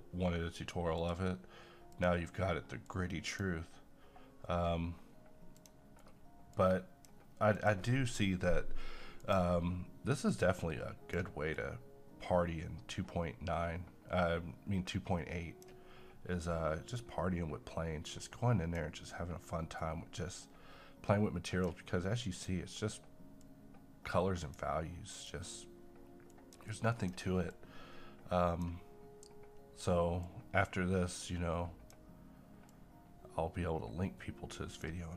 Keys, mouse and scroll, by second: 1.0-35.1 drag.